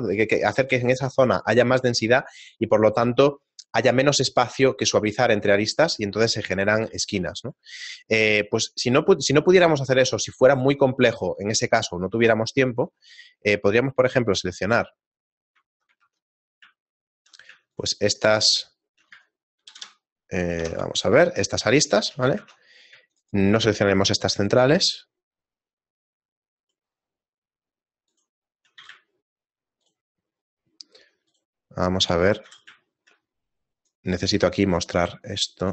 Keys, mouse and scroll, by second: 6.9 ctrl+z, 13.4 alt+shift+right click, 13.7 shift+middle click, 15.2 right click, 16.0 ctrl+Tab, 16.9 shift+middle click, 18.1 shift+right click, 18.6 shift+middle click, 19.7 ctrl+KP_Add, 19.7 ctrl+KP_Add, 20.6 ctrl+KP_Subtract, 21.6 shift+middle click, 22.5 ctrl+Tab, 23.7 shift+right click, 23.8 shift+middle click, 25.9 shift+right click, 25.9 shift+middle click, 28.9 z, 30.2 shift+middle click, 30.2 shift+right click, 31.0 shift+middle click, 31.8 shift+right click, 32.8 shift+middle click, 33.9 click, 34.8 click.